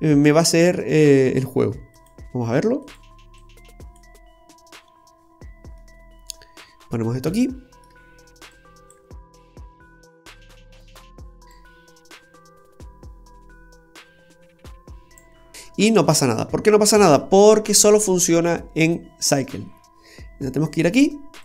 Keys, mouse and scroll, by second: 1.9 click, 4.9-5.2 scroll up 3, 5.2 scroll down 1, 5.8 middle click, 7.1 scroll down 2, 7.4 middle click, 8.5 click, 11.5 click, 15.5 middle click, 16.1-16.4 scroll down 1, 16.4 middle click, 20.6 click.